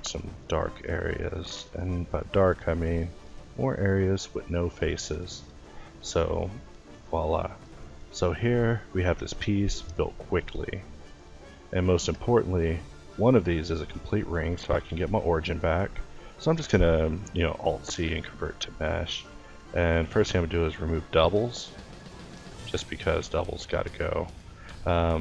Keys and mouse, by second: 0.3 ctrl+t, 5.0 x, 6.0 Tab, 7.7 a, 12.5 Tab, 13.3 Tab, 15.1 a, 16.5 alt+c, 18.5 Tab, 19.0 a, 19.4 w, 23.1 a, 24.0 l, 24.3 l, 25.1 l.